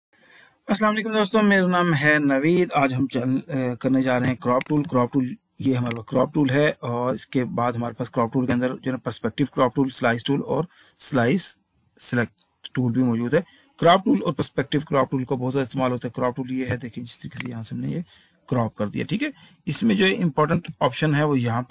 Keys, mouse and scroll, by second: 4.7 click, 5.9 click, 17.5 click.